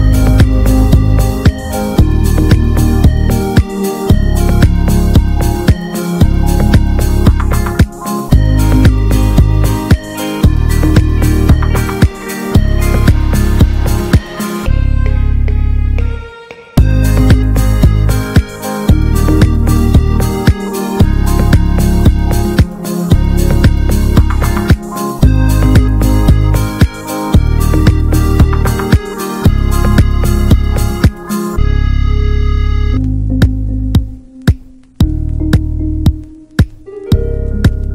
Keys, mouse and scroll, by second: 2.3 middle click, 2.7 Tab, 2.9-3.4 middle drag, 3.4 Tab, 3.6 middle click, 4.5 alt+s, 6.3 Tab, 6.4 drag, 6.6 click, 6.8 ctrl+a, 7.3 Tab, 7.6 middle click, 8.0 Tab, 8.1 click, 8.3 ctrl+a, 8.7 Tab, 8.9 middle click, 9.1-9.7 scroll up 2, 9.2 shift+middle click, 9.7 2, 10.3-11.9 drag, 12.1-13.6 middle drag, 13.6 alt+shift+click, 14.5 shift+middle click, 15.1 alt+shift+click, 15.6 alt+shift+click, 16.4-17.6 shift+middle drag, 17.6 alt+shift+click, 17.9 scroll down 1, 18.1 middle click, 18.7-19.3 scroll up 2, 19.0 middle click, 19.4 shift+middle click, 20.2 scroll up 1, 20.4 middle click, 21.3 ctrl+b, 24.1 scroll down 1, 24.3 Tab, 24.4-24.9 drag, 24.9 ctrl+a, 25.2 middle click, 25.5 `, 25.8 click, 26.2 ctrl+1, 26.7 middle drag, 27.0 click, 27.4 middle drag, 27.6 scroll up 1, 27.8 middle drag, 28.0 drag, 28.5 click, 28.8 middle drag, 29.1 click, 29.2 ctrl+a, 29.7-30.2 middle drag, 30.2 ctrl+s, 30.5 drag, 31.1 middle click, 31.4 click, 31.8 drag, 32.0-33.2 middle drag, 33.3-34.0 alt+middle drag, 34.0 ctrl+s, 34.2-34.5 drag, 34.8-35.3 drag, 35.5 ctrl+a, 35.8-36.2 middle drag, 36.2 ctrl+s, 36.4 ctrl+click.